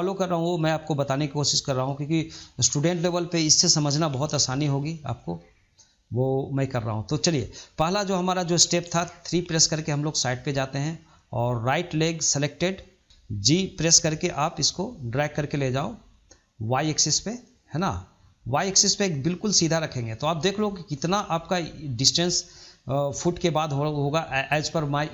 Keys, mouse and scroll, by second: 4.7-5.1 middle drag, 5.1 scroll down 1, 5.3-6.3 shift+middle drag, 6.3-6.6 scroll up 1, 6.6-8.8 shift+middle drag, 8.8 KP_3, 9.8-13.0 shift+middle drag.